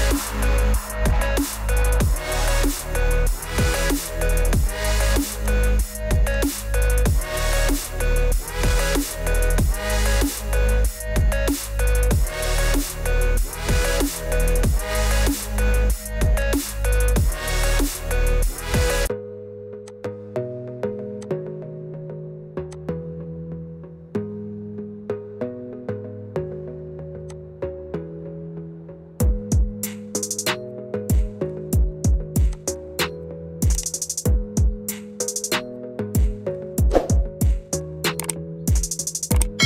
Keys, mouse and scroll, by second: 2.6 click, 4.9 click, 5.4 click, 6.4 click, 8.8 click, 10.0 click, 12.3 click, 15.6 click, 16.4 click, 18.3 click, 19.0 click, 20.6 click, 21.2 click, 24.6 click, 26.5 middle click, 28.2 click, 29.8 alt+r, 32.6 click, 36.9 click.